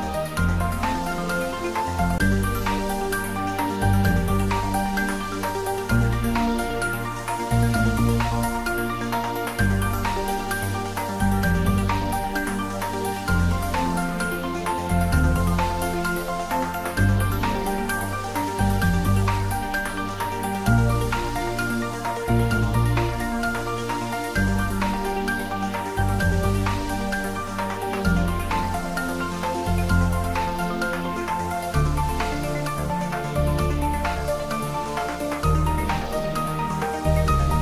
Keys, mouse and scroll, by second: 0.0-0.3 typing, 5.7 click, 9.2 click, 9.4 click, 17.4-19.1 scroll up 1, 19.5 y, 21.7 click, 22.5 s, 23.8 x, 24.4 click, 24.9 s, 26.4-27.4 typing, 26.4 click, 29.5 click, 31.7 shift+d, 32.0 x, 33.0 y, 36.7 click.